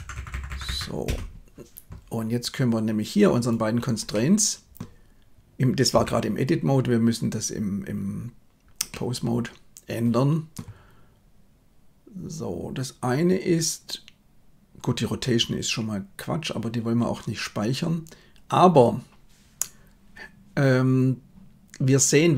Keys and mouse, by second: 0.1 Delete, 0.4 Delete, 0.6 Delete, 4.2 middle click, 6.0 Tab, 8.8-10.5 middle drag.